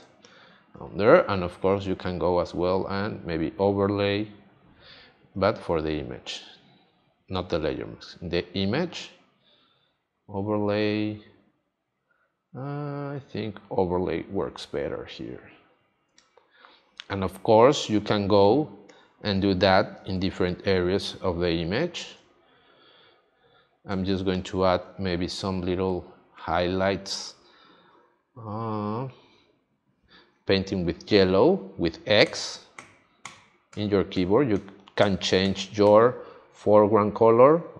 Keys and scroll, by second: 0.0 space, 16.0 space, 18.9 space, 23.9 space, 32.2 x.